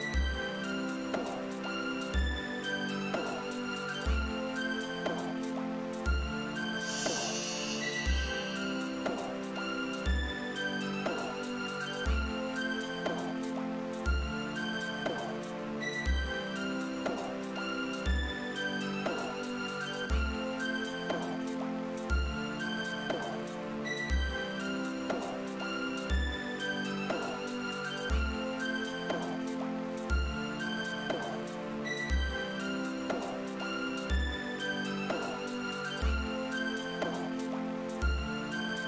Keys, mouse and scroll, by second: 5.1 click, 6.0 click, 7.2 click, 8.3 click, 9.3 click, 13.9-16.8 drag, 19.7 click, 23.7 click, 24.7-26.2 drag, 27.8-28.8 drag, 29.5 click, 34.4 g, 35.9 click.